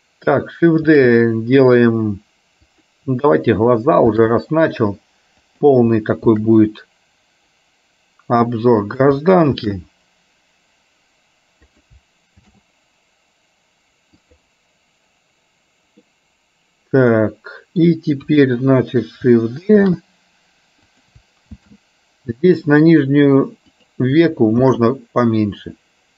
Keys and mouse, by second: 1.0 shift+d, 4.3 shift+d, 6.4 shift+d, 9.6 shift+d, 12.5 shift+d, 16.1-17.9 middle drag, 18.4 KP_1, 20.0 shift+d, 21.8 shift+d, 24.8 shift+d.